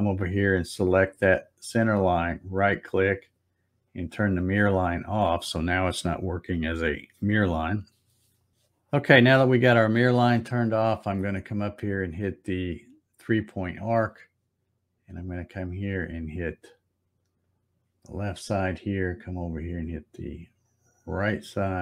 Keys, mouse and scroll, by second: 1.9 right click, 3.9 click, 13.4 click, 17.4 click.